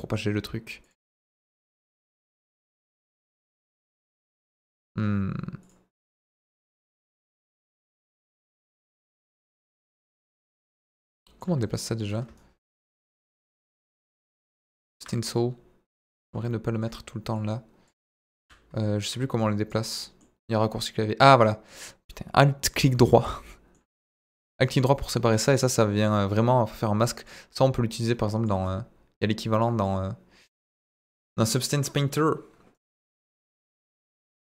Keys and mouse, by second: 1.2-2.3 drag, 3.1 click, 4.6-5.7 drag, 6.1 middle click, 6.9 middle click, 7.8 shift+middle click, 8.2 middle click, 9.1 click, 11.8 right click, 12.3 ctrl+right click, 15.3 click, 17.3 click, 19.9 alt+middle click, 20.4 alt+right click, 21.6-22.8 alt+right drag, 23.2 alt+middle click, 24.0 middle click, 24.6 alt+right click, 25.7 middle click, 26.3 alt+right click, 27.2-28.4 drag, 28.6 alt+right click, 29.8-31.3 drag, 31.5 middle click, 32.7 right click, 33.1 click, 33.9 right click, 34.3 alt+right click.